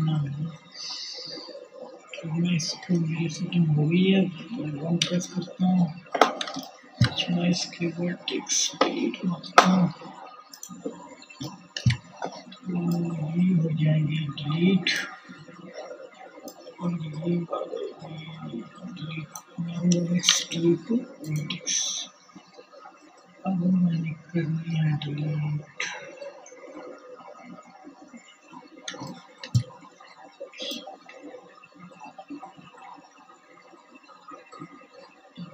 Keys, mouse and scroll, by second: 0.5 Tab, 2.6 KP_1, 8.2 click, 17.9 x, 21.0-27.2 drag.